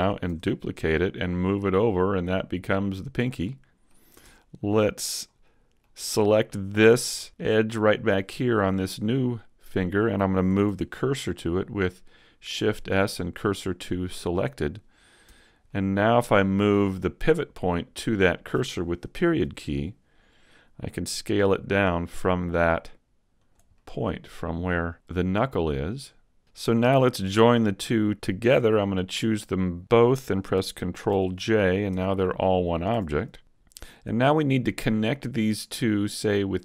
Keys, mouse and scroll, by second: 0.3 shift+d, 0.7 click, 1.5 click, 3.4 middle click, 4.2 Tab, 5.3 middle click, 6.6 middle click, 8.5 middle click, 10.7 shift+s, 15.3 Tab, 15.7 middle click, 19.4 ., 21.1 s, 23.5 click, 23.7 middle click, 26.7 middle click, 27.2-28.1 scroll up 2, 28.8 shift+right click, 29.3 middle click, 31.1 ctrl+j, 31.9 Tab, 33.2 middle click, 33.2 a, 33.8-34.7 shift+scroll up 1, 34.7 middle click, 35.9 shift+right click.